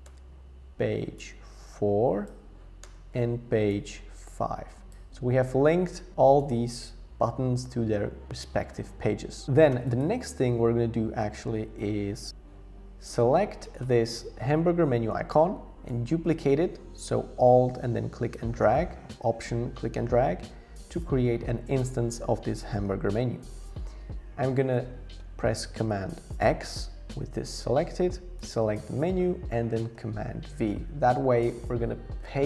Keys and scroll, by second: 0.1 Tab, 2.8 Tab, 26.5 super+x, 30.5 super+v.